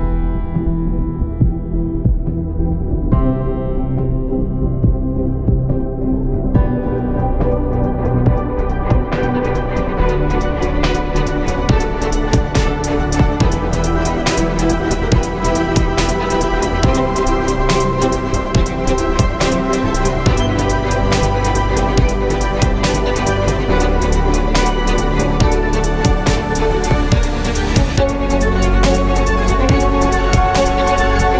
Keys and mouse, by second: 3.1 KP_1, 3.9 ctrl+KP_1, 4.5 z, 5.5 shift+a, 6.3 s, 8.2 s, 11.3 s, 12.8 s, 14.7 s, 15.6 s, 19.6 s, 22.0-22.4 drag, 23.5-26.0 drag, 23.8 z, 25.8 s, 27.1 z, 27.4 z, 30.2-31.3 middle drag.